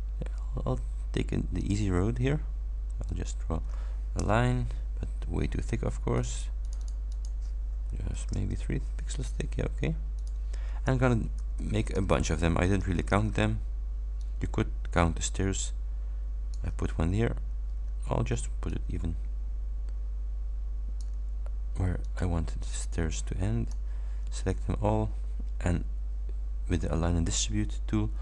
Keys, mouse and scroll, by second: 0.0 ctrl+scroll up 2, 1.6 ctrl+click, 3.2 ctrl+click, 4.2 Return, 6.2 click, 8.4 shift+Return, 10.2 click, 11.4 ctrl+d, 12.8 ctrl+d, 14.3-16.8 ctrl+drag, 18.8-21.3 ctrl+drag, 22.1 click, 22.7-24.0 drag.